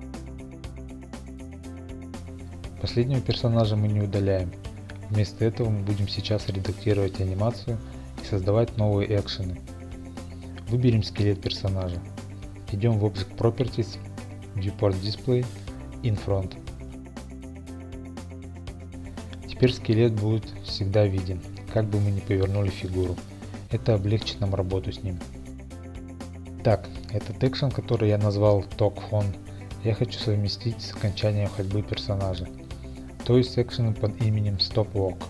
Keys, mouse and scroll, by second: 0.6 Return, 6.0 click, 6.4 middle click, 6.8-7.3 scroll, 9.4 shift+middle click, 10.8 click, 12.6-13.3 scroll, 13.3 click, 15.4 click, 18.0 click, 23.3 middle click, 23.9 middle click.